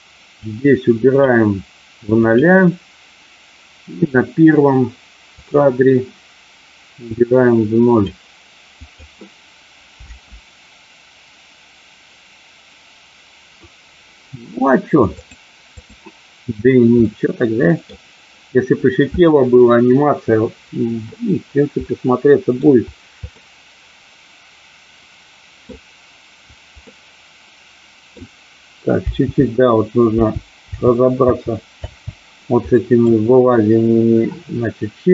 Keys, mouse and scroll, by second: 0.4 click, 2.3 click, 4.0 click, 5.4 click, 7.3 click, 8.9 click, 10.0 space, 15.3 click, 17.0 middle click, 21.8 middle click, 23.4-25.6 middle drag, 26.9-28.1 middle drag, 29.1 space, 30.1 space, 30.7 space, 31.1 space, 32.6 middle click, 32.6 space.